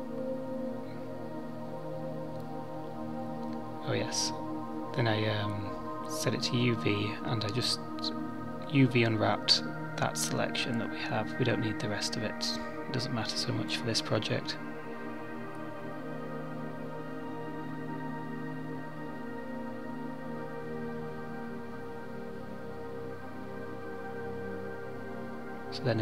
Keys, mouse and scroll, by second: 0.7 click, 4.9 click, 25.0 click, 25.8 middle click.